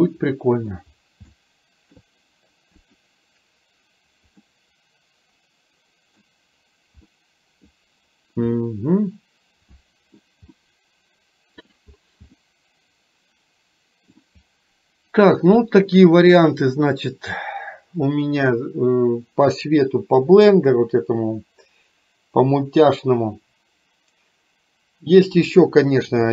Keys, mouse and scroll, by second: 0.5 middle drag, 1.4-2.0 shift+middle drag, 2.9 click, 4.5-6.2 middle drag, 7.2-7.7 middle drag, 8.6-10.2 middle drag, 10.6-11.9 middle drag, 12.4-14.2 middle drag.